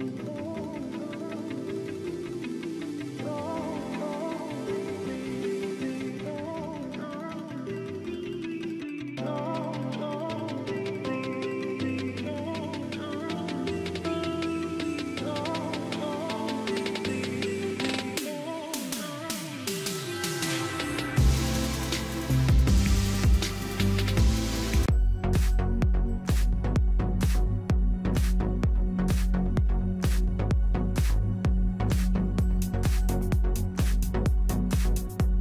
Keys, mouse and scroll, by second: 2.2 ctrl+=, 2.5 ctrl+=, 3.0 ctrl+=, 4.1 ctrl+-, 16.8 shift+click, 18.2 ctrl+g, 27.7-28.0 typing, 28.8 ctrl+a, 29.3 t, 30.0 x, 30.4 t, 31.3 ctrl+a, 31.6 ctrl+c, 32.0 ctrl+Right, 32.3 Return, 32.7 ctrl+v, 33.6 ctrl+a.